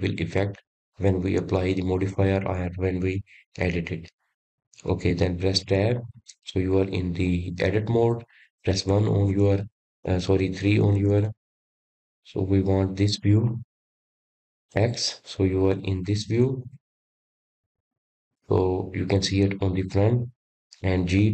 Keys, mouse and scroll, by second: 9.2 Tab, 10.4-12.5 middle drag, 12.5 KP_1, 13.9 KP_3, 15.4-18.2 middle drag, 18.2 click, 20.2-20.8 scroll up 4, 21.2 scroll down 4.